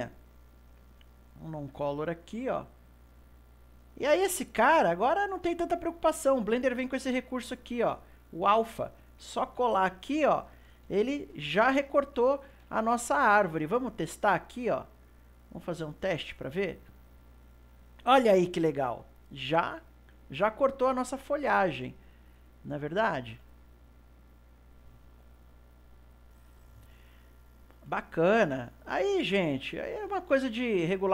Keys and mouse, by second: 4.6 click, 6.9 click, 11.1 ctrl+middle click, 11.7 ctrl+s, 12.3-14.9 shift+middle drag, 14.9 click, 15.9 click, 21.1-24.3 ctrl+middle drag, 24.3 click, 28.1 click, 30.4-31.1 shift+middle drag.